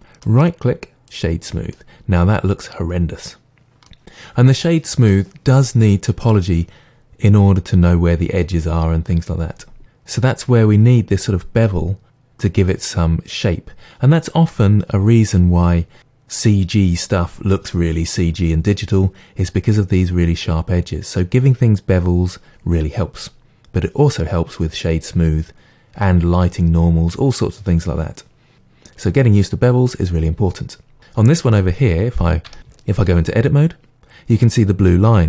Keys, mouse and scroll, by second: 0.3-1.7 right drag, 1.7-2.9 middle drag, 3.4-31.0 middle drag, 31.0 click, 32.5 Tab.